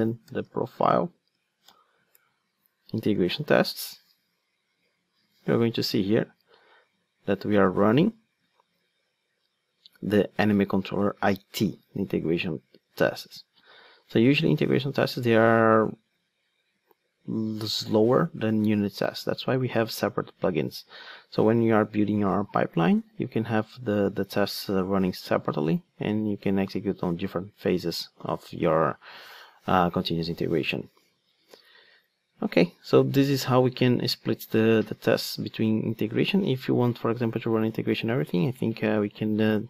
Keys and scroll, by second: 37.7 super+c.